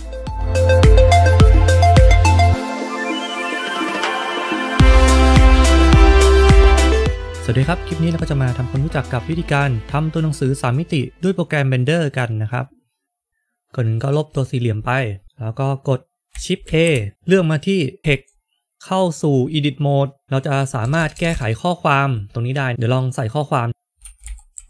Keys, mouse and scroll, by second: 13.3 click, 14.2 click, 14.2 Delete, 16.6 shift+a, 18.7 click, 19.4 click, 19.4 Tab, 20.7-21.2 BackSpace, 23.9-24.6 typing.